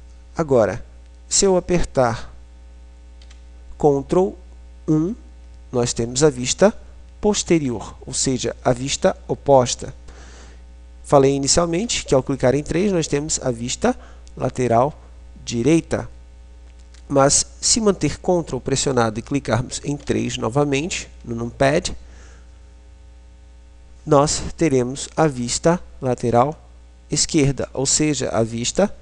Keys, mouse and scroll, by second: 3.4 ctrl+KP_1, 7.0 KP_3, 17.0 ctrl+KP_3.